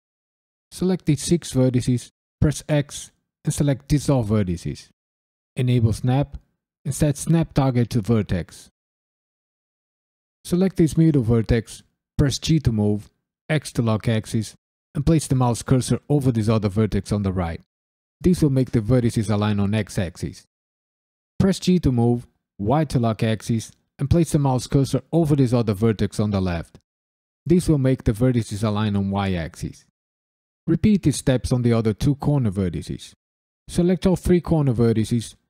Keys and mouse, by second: 0.0 shift+click, 0.6 shift+click, 2.4 x, 5.5 click, 6.5-8.9 drag, 10.3 click, 12.4 g, 13.5 x, 18.2-21.3 drag, 21.3 g, 22.6 y, 27.5-29.6 drag, 30.5 click, 30.8-32.7 typing, 31.1 click, 31.6 click, 32.4 click, 32.9 click, 33.5 shift+click.